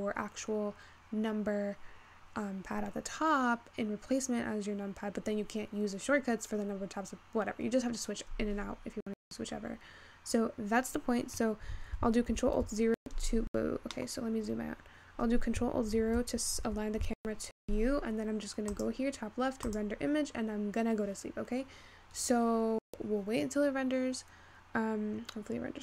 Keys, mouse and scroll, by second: 17.3 ctrl+alt+KP_0.